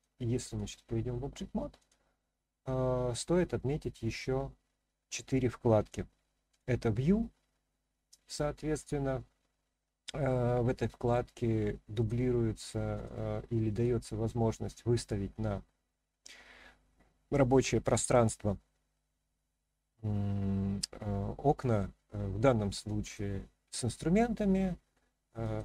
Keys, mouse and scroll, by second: 1.8 click, 6.5-12.1 drag, 13.8 click, 23.0-25.6 drag.